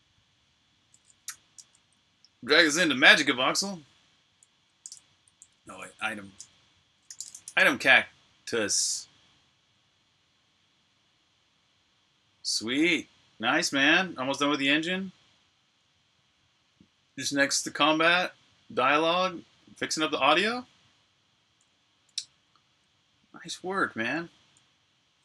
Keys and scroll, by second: 4.4-5.2 typing, 6.6-7.9 typing.